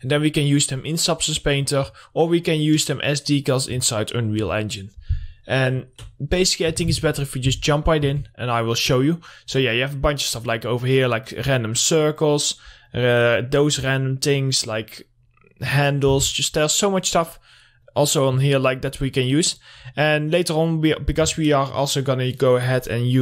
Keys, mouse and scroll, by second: 7.0 click, 7.9 Right, 9.9-10.2 scroll up 1, 10.2 click, 10.7-11.4 scroll up 1, 11.4 click, 13.1 scroll up 1, 13.3 click, 14.2 scroll down 1, 15.4 click, 16.5 Right, 17.9 scroll up 1, 18.3 click, 19.1-19.6 scroll up 1, 19.7 click, 20.2 scroll down 1.